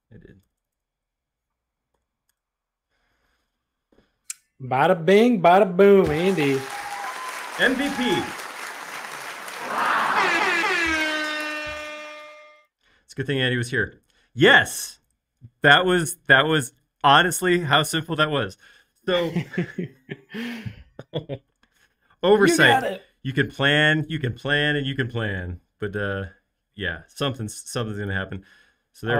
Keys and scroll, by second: 0.6 BackSpace, 0.7 BackSpace, 1.9 y, 2.3 Return.